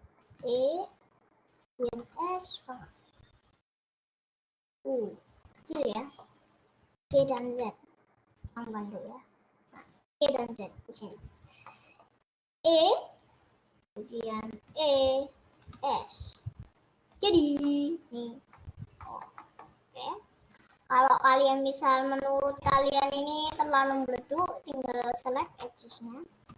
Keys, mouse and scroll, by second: 0.4 e, 1.8 5, 5.8-7.2 middle drag, 7.2 g, 11.6-12.6 middle drag, 12.6 e, 14.6 e, 16.1 s, 17.4 scroll down 2, 17.6-18.9 middle drag, 18.9 scroll up 1, 19.0 middle click, 19.8 scroll up 1, 21.8 click, 22.2-23.6 middle drag, 23.8-25.4 drag, 25.6 middle click.